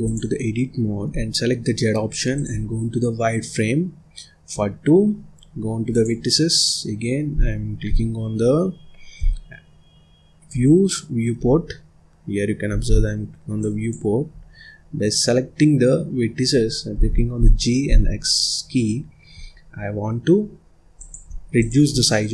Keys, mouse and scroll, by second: 1.0 z, 4.5 scroll down 2, 4.8-5.4 scroll up 2, 5.8 click, 7.7 KP_3, 9.1 KP_7, 10.4 KP_8, 11.3 KP_1, 12.9-13.5 scroll up 3, 13.5 click, 14.2-14.7 scroll down 1, 14.7-16.0 scroll up 1, 16.9 g, 21.5 click, 21.9 scroll down 2, 22.0 middle click.